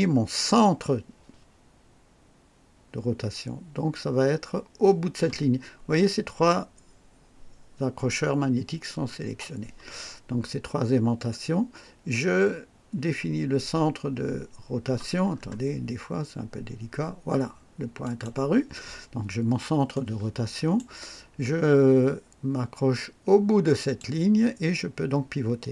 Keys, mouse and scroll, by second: 15.3 scroll up 2, 18.0 click, 19.4-19.8 scroll down 2, 20.0 right click, 23.8 click.